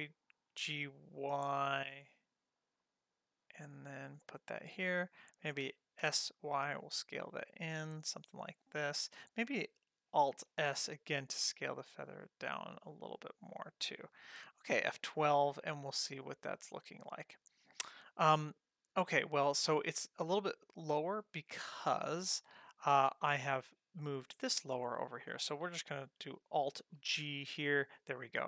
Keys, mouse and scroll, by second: 5.6 s, 10.5 alt+s, 15.1 F12, 22.8 click, 27.1 alt+g.